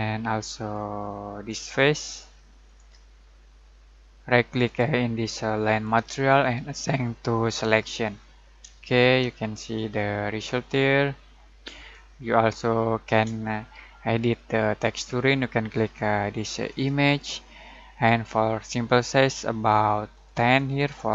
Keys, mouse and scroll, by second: 2.0 ctrl+click, 4.6 click, 5.8 right click, 7.6 click, 8.9-10.8 shift+middle drag, 16.6 click, 20.1 click.